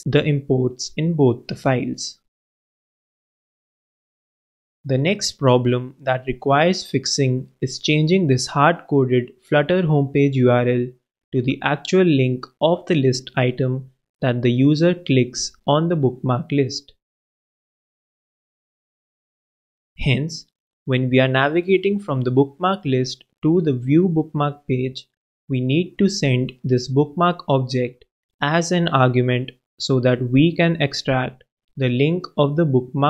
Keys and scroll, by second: 2.4 super+w, 3.7 super+BackSpace, 4.6 alt+super+BackSpace, 4.8 alt+super+Return, 21.7 super+w, 32.8 super+b.